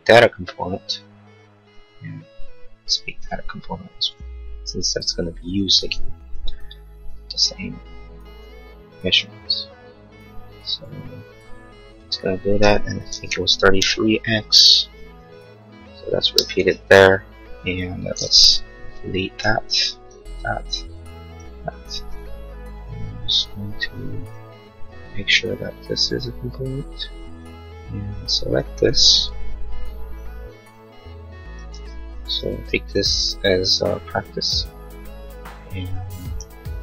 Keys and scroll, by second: 7.1 m, 13.1 3, 13.6 x, 13.8 Return, 16.4 space, 17.1 space, 19.4 Delete, 29.9 m.